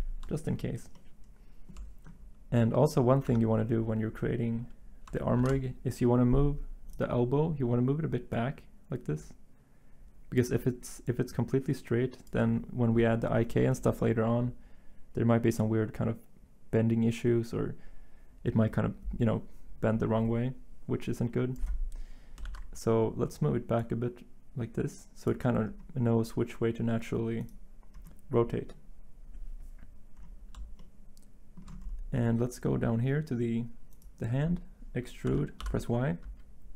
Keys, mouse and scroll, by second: 3.2 Tab, 5.4 z, 22.4 ctrl+z, 35.3-35.6 typing.